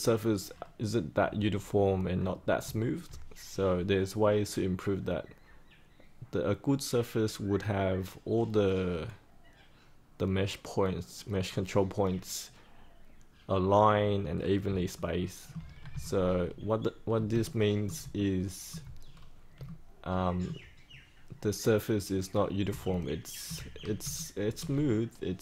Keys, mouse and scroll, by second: 0.4 scroll down 1, 14.3-14.6 scroll up 1, 14.9 alt+middle click, 16.0 alt+middle click, 17.4 shift+middle click, 18.1 alt+middle click, 19.0-19.5 scroll down 1, 22.8 alt+middle click, 23.7 scroll up 1, 24.1 shift+middle click, 24.8 alt+middle click.